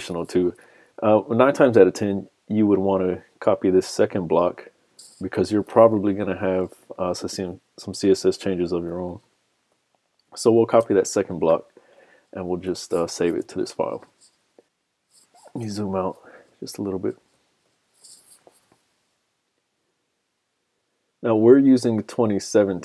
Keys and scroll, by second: 5.7 super+c, 9.3 super+Tab, 10.9 super+v, 13.8 super+s, 16.1 super+-, 16.7 super+-, 17.2 super+-, 17.8 super+-.